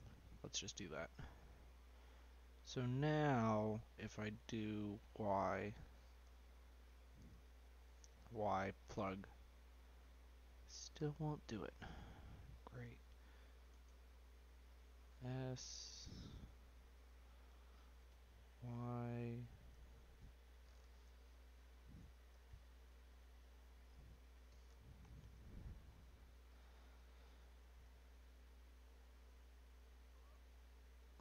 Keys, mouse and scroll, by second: 0.8 Tab, 1.2-2.6 scroll up 11, 2.6 click, 5.0 y, 7.2 shift+click, 8.3 y, 9.9-11.3 middle drag, 11.3 ctrl+scroll up 1, 11.5 ctrl+z, 11.8-12.8 middle drag, 12.8 s, 14.3 click, 15.0 s, 18.5 ctrl+y, 19.7 y, 21.2 shift+click, 22.3 y, 23.9-25.3 middle drag, 25.3 ctrl+z, 25.8-26.4 scroll down 1, 26.4 click, 26.9 click, 27.8 Tab, 28.8-31.2 drag.